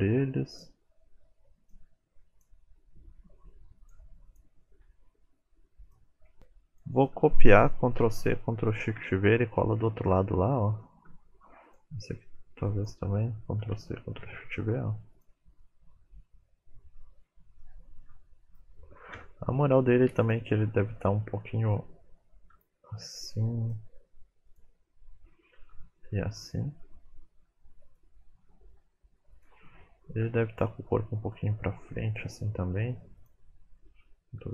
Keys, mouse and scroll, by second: 0.5 click, 1.1 r, 1.5 click, 1.7 r, 2.1 click, 2.3 r, 2.9 click, 3.0 middle click, 3.2 click, 3.4 middle click, 3.6 r, 3.9 middle click, 4.2 r, 4.8 click, 5.1 middle click, 5.1 r, 5.4 click, 5.6 g, 6.0 scroll down 5, 6.2 middle click, 6.4 click, 7.9 ctrl+c, 9.0 ctrl+shift+v, 9.2-9.8 scroll down 10, 9.9 shift+middle click, 10.2-10.8 scroll up 8, 10.8 shift+middle click, 11.7 click, 13.6 ctrl+c, 14.4 ctrl+shift+v, 15.1 click, 16.1 middle click, 17.2-18.1 scroll down 3, 17.6 middle click, 19.2 KP_1, 20.2 click, 22.4 r, 24.5 click, 25.6 r, 29.3 click, 30.3 KP_7, 31.2 r, 33.2 click, 34.3 r.